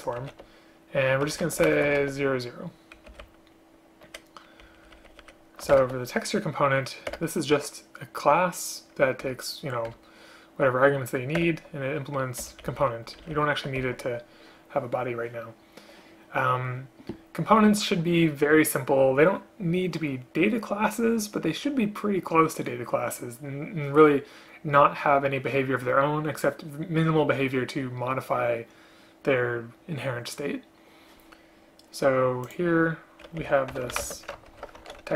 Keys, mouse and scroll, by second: 1.7 space, 3.2 Up, 3.3 Left, 4.7 Left, 5.8 alt+Return, 7.2 Return, 9.4 Return, 10.0 Return, 12.5 End, 12.8 Left, 12.9 Left, 13.3 shift+Down, 13.4 shift+Down, 13.9 Delete, 33.5 Left, 34.1 space, 34.6 ctrl+Delete.